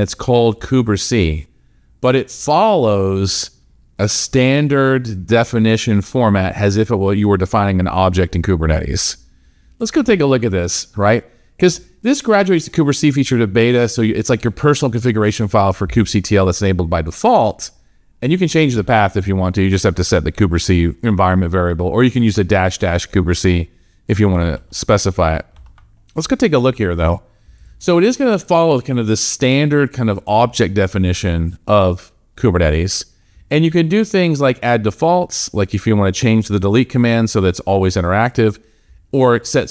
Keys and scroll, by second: 24.4 alt+Tab.